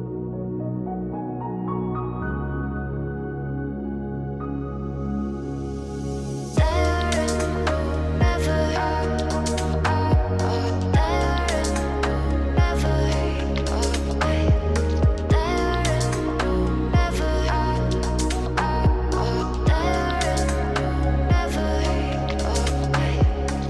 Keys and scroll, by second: 5.3 ctrl+z, 10.1 ctrl+t.